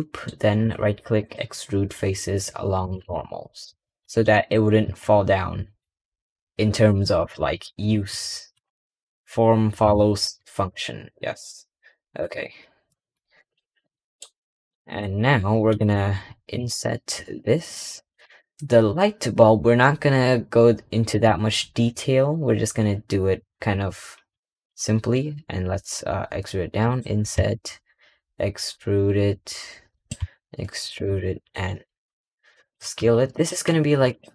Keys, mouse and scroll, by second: 0.5-2.8 right drag, 2.9 middle click, 3.6 Tab, 3.8-4.2 scroll up 1, 4.2 click, 4.7 g, 7.1 click, 7.5 middle click, 13.3 click, 13.8 middle click, 14.1 middle click, 15.0-31.0 middle drag, 31.3 middle click.